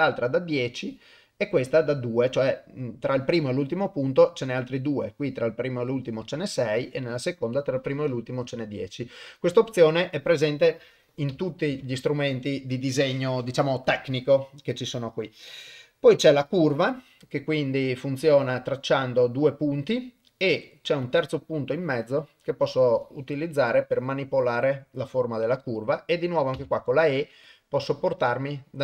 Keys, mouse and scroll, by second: 11.7 Tab, 16.5 click, 18.2-28.8 drag.